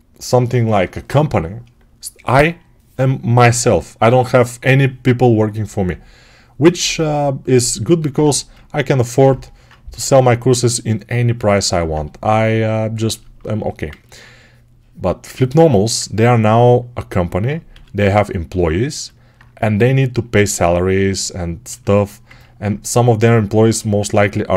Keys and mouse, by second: 8.1 1, 17.6 g.